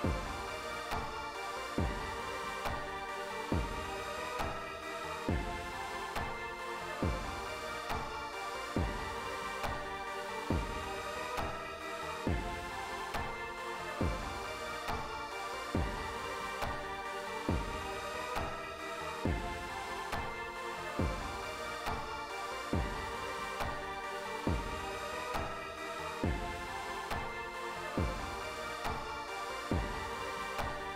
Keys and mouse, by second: 7.9 click, 9.7 click, 11.8-13.1 drag, 19.2 click, 23.2 click, 26.5 click, 28.5 click.